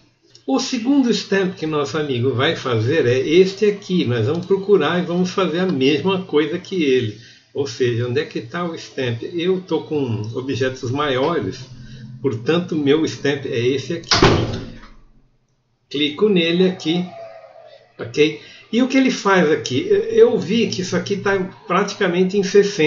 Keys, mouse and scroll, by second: 0.3-4.4 alt+middle drag.